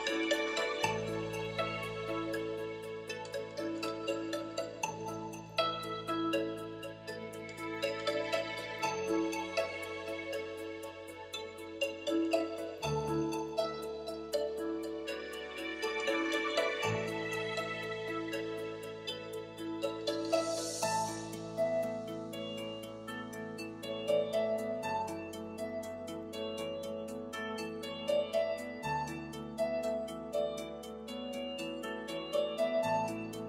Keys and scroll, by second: 7.9 shift+super+z, 19.5 shift+super+s.